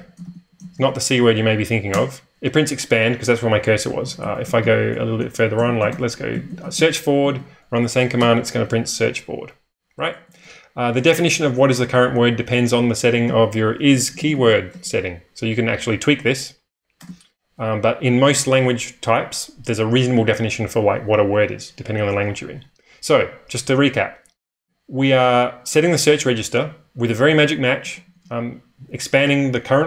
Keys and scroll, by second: 0.0-0.4 typing, 2.0 Return, 4.0-7.2 typing, 9.8-15.3 typing, 17.0 typing, 24.6-25.8 typing, 27.5-28.3 typing.